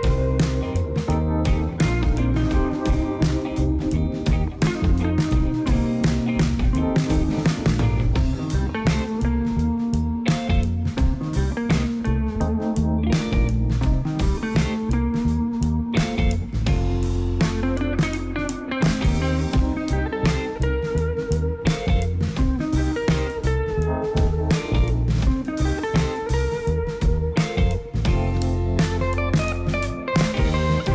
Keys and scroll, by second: 3.9 i, 14.2 i, 29.0 i.